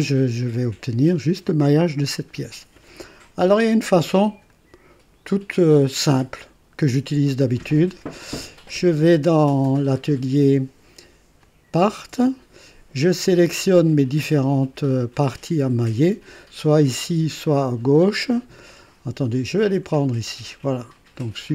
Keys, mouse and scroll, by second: 0.0 click, 4.4 click, 11.6 click, 19.6 ctrl+click.